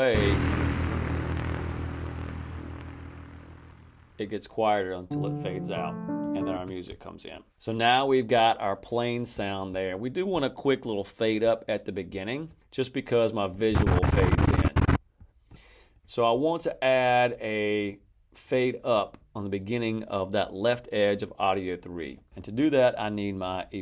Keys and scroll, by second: 0.0 space, 6.5 space.